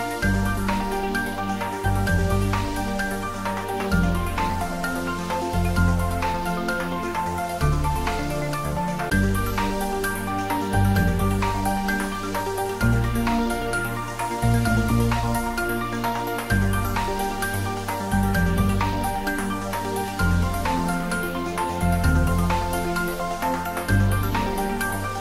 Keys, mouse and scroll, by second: 2.1 ctrl+s, 2.6 shift+middle click, 3.0 ctrl+middle click, 4.1 click, 5.0 Tab, 5.6 s, 6.1 click, 6.6 ctrl+z, 8.2 alt+e, 11.3 click, 16.0 click, 16.2 Tab, 16.5 middle click, 17.5 `, 17.8 3, 18.4 ctrl+middle click, 19.3 ctrl+middle click, 19.9 Tab, 20.5 click, 23.1 shift+click.